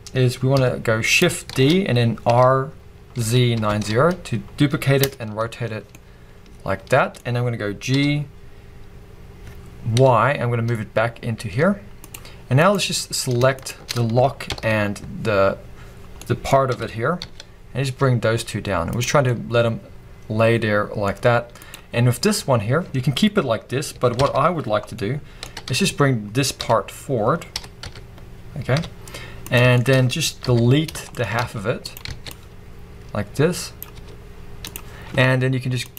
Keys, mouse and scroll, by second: 0.6 KP_7, 1.5 shift+d, 5.9 scroll down 1, 5.9 middle click, 7.9 g, 12.6 click, 13.6 shift+click, 14.5 ctrl+l, 16.2 middle click, 16.7 g, 19.0 click, 19.3 middle click, 20.3 middle click, 21.2-21.6 scroll up 2, 21.6 click, 24.2 ctrl+l, 25.0 middle click, 25.5 g, 25.7 y, 26.6 x, 27.5 g, 29.5 click, 29.8 shift+middle click, 30.4 KP_3, 31.1 shift+scroll up 1, 31.2 shift+middle click, 31.4 z, 32.1 alt+a, 32.3 click, 34.0 x, 35.8 click.